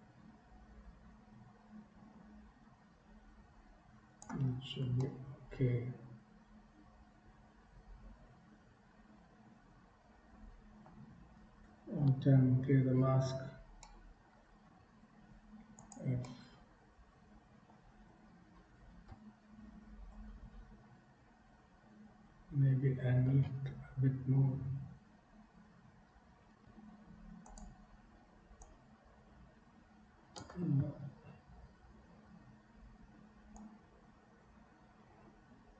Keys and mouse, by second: 5.2-10.9 middle drag, 12.3 alt+m, 13.9 shift+click, 14.8 f, 16.3-17.7 middle drag, 19.1 KP_1, 29.1-30.7 drag, 31.7 ctrl+z, 34.1-35.7 drag.